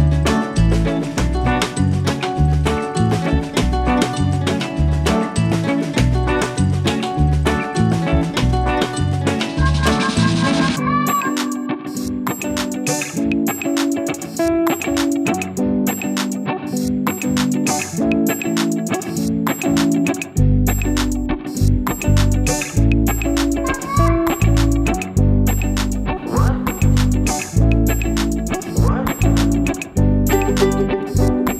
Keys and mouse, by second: 0.4 click, 1.5 click, 6.0 v, 6.2 click, 6.8 b, 7.2 click, 7.8 click, 9.5 click, 10.9 click, 11.9 click, 12.8 click, 13.5 ctrl+z, 13.8 click, 15.2 v, 15.4 click, 16.1 b, 16.4 click, 16.7 click, 18.2 click, 19.8 ctrl+s, 21.1 click, 21.5 click, 22.3 ctrl+l, 27.0 click, 27.8 click, 28.7 click, 30.0 click, 31.1 space, 31.4 click, 31.4 space.